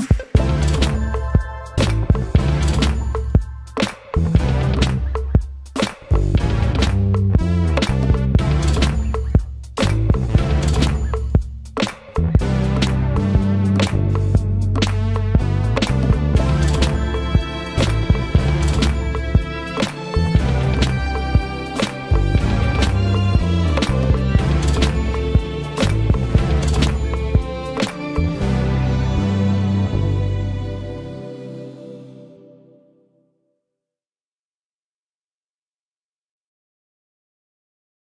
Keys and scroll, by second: 20.0 space, 21.5 m, 30.2 shift+s, 32.7 ctrl+shift+space, 34.0 p, 37.0 space, 37.1 Escape.